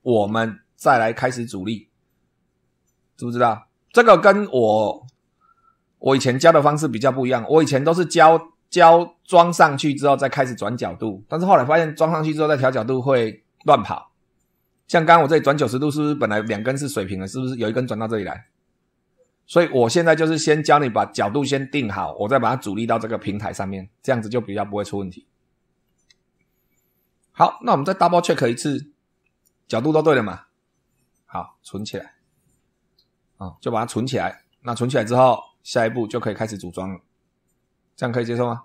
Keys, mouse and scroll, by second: 0.7 scroll down 2, 25.7 scroll down 2, 27.7-28.7 middle drag, 28.7 scroll up 2, 31.7 click, 33.4-34.1 scroll down 4, 34.4 scroll down 2.